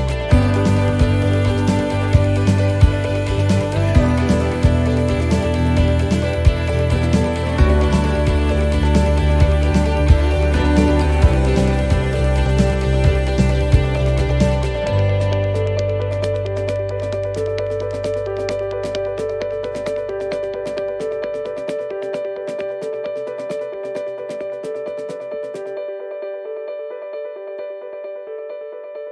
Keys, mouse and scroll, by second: 0.8 ctrl+r, 4.5 middle click, 5.0 scroll up 3, 5.4 middle click, 5.9 ctrl+r, 14.7 right click, 15.1 shift+right click, 18.0 right click, 20.0 right click, 20.2 shift+right click, 21.6 middle click, 22.9 e, 24.4 middle click, 25.3-26.5 scroll up 5, 25.7 shift+middle click, 26.5 middle click, 28.4 click.